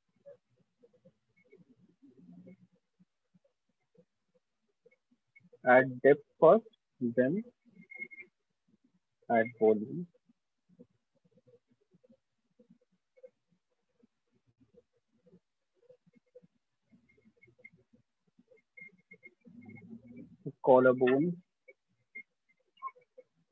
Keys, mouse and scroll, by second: 0.4 alt+click, 4.4 alt+click, 5.4 alt+click, 6.4 alt+click, 8.4 shift+click, 9.4 alt+click, 10.4 shift+click, 12.4 click, 14.4 click, 17.5 shift+click, 18.4 click, 19.4 alt+click, 21.4 click, 23.4 alt+click.